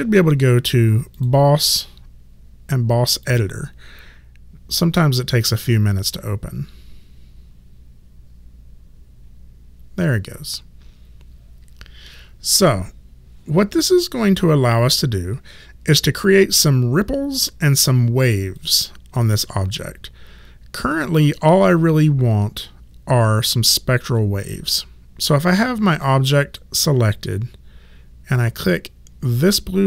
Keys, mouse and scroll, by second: 1.2 click, 3.3 click, 18.6 click.